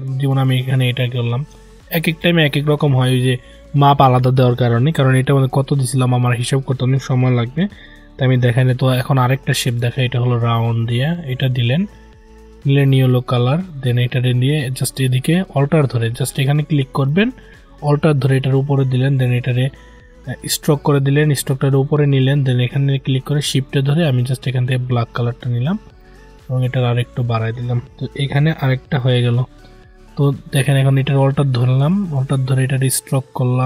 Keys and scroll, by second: 16.0 ctrl+z.